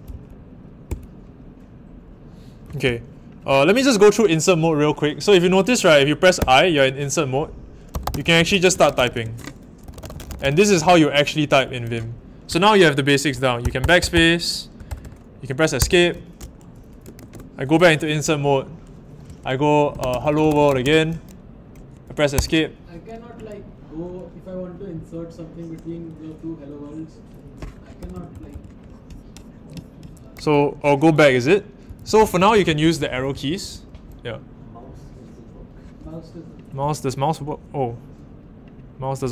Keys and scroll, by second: 0.1 shift+;, 0.8 Down, 6.4 i, 7.6-11.2 typing, 13.6-15.0 typing, 15.7 Escape, 17.1 shift+a, 19.6-21.3 typing, 22.3 Escape, 28.0 super+=, 31.8 Left, 32.0 Left, 32.2 Left, 32.3 Left, 32.5 Left, 32.6 Left, 32.8 Left, 33.0 Left, 33.1 Left, 33.3 Left, 33.6 Right, 33.9 Left.